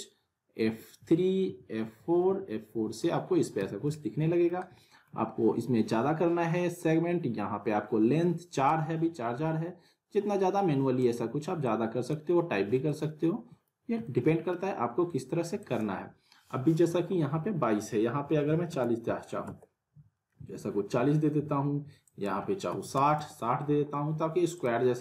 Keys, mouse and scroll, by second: 4.0-4.6 alt+middle click, 4.6 scroll down 2, 4.8 middle click, 5.1-6.9 scroll up 2, 8.6-11.1 drag, 12.8-13.8 alt+middle click, 13.8 scroll down 2, 14.0-14.6 alt+middle drag, 22.0 click, 24.5 click, 24.8 scroll up 1.